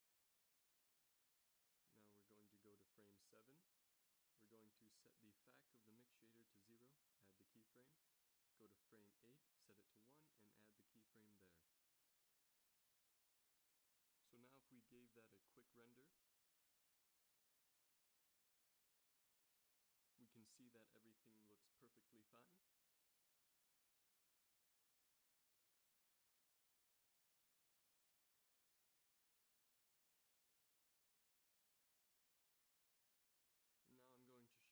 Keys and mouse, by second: 1.2 Left, 6.3 i, 8.1 Right, 10.2 i, 12.3 ctrl+s, 13.4 shift+Left, 14.2 shift+z, 17.1 Right, 17.4 Right, 17.7 Right, 17.8-18.3 Right, 18.5 Right, 18.7 Right, 19.0-19.7 Right, 19.9 Right, 20.1 Right, 20.5 Right, 20.7 Right, 21.0 Right, 21.1 Right, 21.5 Right, 21.7 Right, 21.9 Right, 22.1 Right, 22.6 Right, 22.8 Right, 23.0 Right, 23.2 Right, 23.4 Right, 23.6-24.2 Right, 24.3 Right, 24.5 Right, 24.7 Right, 27.5 ctrl+s, 32.9 z, 33.0 z.